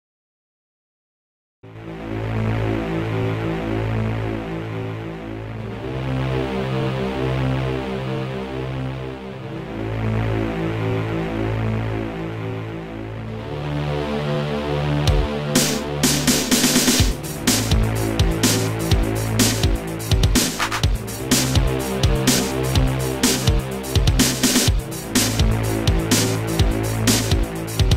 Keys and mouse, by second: 0.3 click, 0.6 click, 1.8 shift+click, 7.3 click, 8.1 click, 9.2 click, 9.7 click, 11.2 click, 12.5 click, 14.7 click, 15.8 click, 16.6 click, 18.6 click, 19.6 click, 22.3 click, 22.9 click, 23.8 shift+click, 24.5 shift+click, 25.8 click, 26.4 click, 27.5 click.